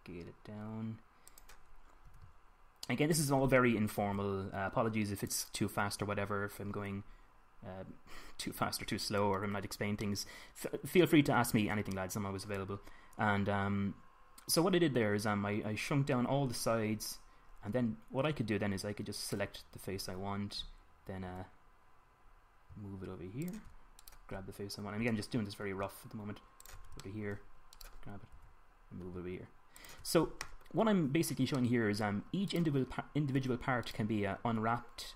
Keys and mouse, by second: 0.1 s, 2.9 g, 4.8 s, 10.9 middle click, 12.7-14.3 middle drag, 17.7-22.0 drag, 22.1 g, 24.3 click, 25.9 g, 26.6 click, 28.6 middle click, 29.2 g, 33.4 right click, 33.8-35.0 drag.